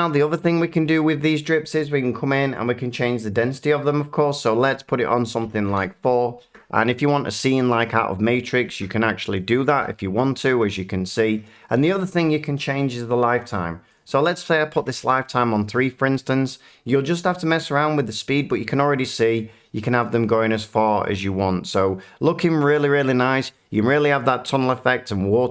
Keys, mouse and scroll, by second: 3.4 click, 5.4 typing, 5.6 Return, 7.8 middle click, 8.5 middle click, 9.8-10.3 middle drag, 11.3 middle click, 13.9 click, 14.8 3, 15.0 Return, 18.9-21.0 middle drag.